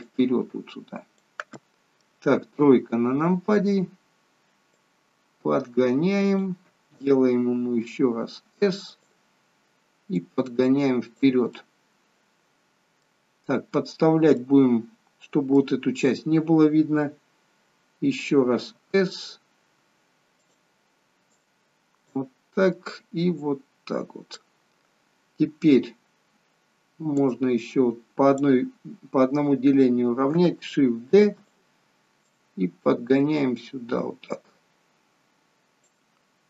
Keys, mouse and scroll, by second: 0.1 click, 1.6 middle click, 2.5 KP_3, 4.8 click, 7.7 s, 10.2 click, 11.6 middle click, 13.3-13.7 scroll up 2, 14.5 middle click, 18.7 s, 21.3 click, 23.4 click, 27.2 click, 31.1 shift+d, 32.3 click.